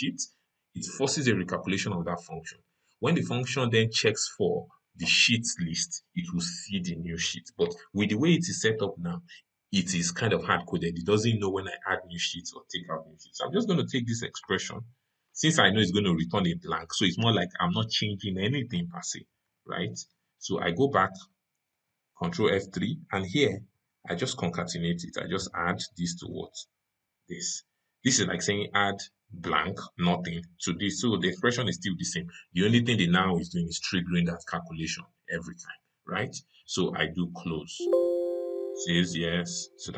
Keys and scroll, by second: 21.5 ctrl+F3.